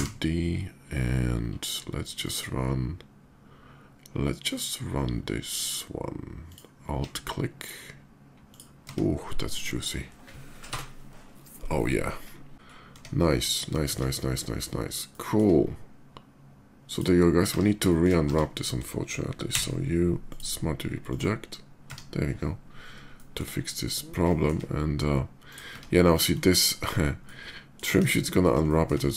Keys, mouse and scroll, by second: 1.8 click, 4.2 click, 6.2 alt+click, 8.2 alt+click, 8.5 Tab, 10.8 KP_0, 12.0 middle click, 12.7 Tab, 13.5 shift+middle drag, 14.8 shift+middle drag, 16.5 shift+click, 17.6 shift+middle click, 17.8 shift+Tab, 18.0 a, 19.4 u, 20.0 click, 20.8 click, 21.6 Tab, 22.9 shift+middle drag, 23.7-24.2 shift+middle drag, 25.2 shift+click, 25.4 Tab, 26.2 alt+middle click, 27.7 KP_5, 28.4 shift+middle click.